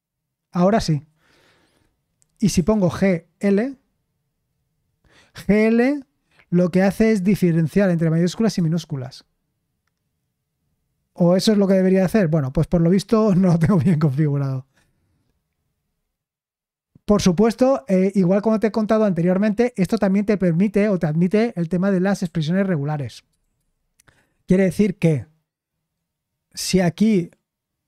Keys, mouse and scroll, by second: 2.5-3.3 typing, 8.5 Return, 11.6 Escape, 20.0-22.2 drag, 22.2 u, 23.4 shift+g.